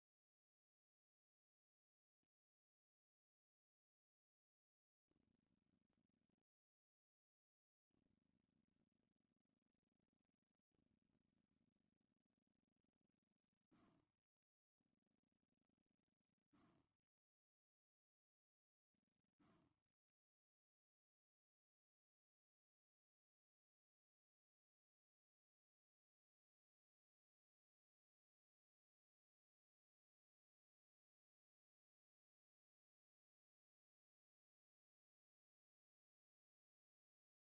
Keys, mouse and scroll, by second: 1.2 click, 2.5-5.8 ctrl+drag, 9.8 ctrl+click, 11.3-14.7 drag, 15.0-16.0 drag, 23.3-25.1 shift+drag, 25.6-26.7 drag, 27.3-28.4 shift+drag, 31.1 middle click, 32.0-35.9 shift+drag.